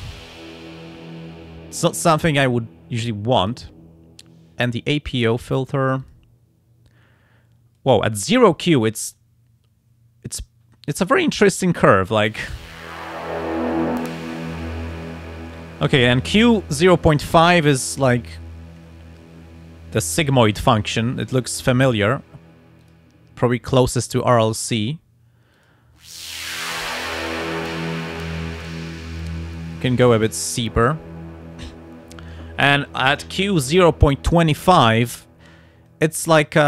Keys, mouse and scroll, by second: 1.8 click, 3.4 click, 5.7 click, 7.8 click, 9.1-11.4 drag, 14.0 scroll up 1, 22.0 click, 22.8 click, 24.7 click, 25.5 click, 27.7 scroll up 1, 28.2-28.9 scroll up 2, 29.2-30.3 scroll down 4, 30.6 scroll down 2, 35.9-36.6 drag.